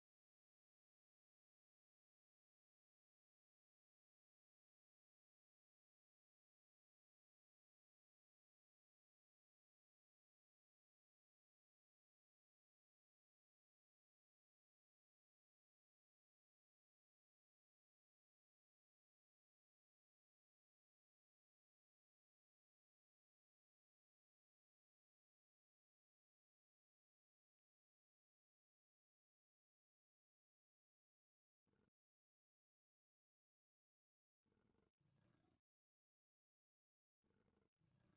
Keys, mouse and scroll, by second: 2.0 shift+middle click, 7.3-13.4 ctrl+drag, 14.6 shift+middle click, 15.8 a, 15.9 c, 17.7 right click, 18.5-26.5 ctrl+drag, 29.9 e, 30.1 KP_5, 30.4 KP_Enter, 35.0 e, 35.2 KP_Decimal, 35.4 KP_0, 35.5 KP_5, 36.2 KP_Enter, 36.6 e, 36.8 KP_Decimal, 37.0 KP_0, 37.1 KP_5, 37.7 KP_Enter.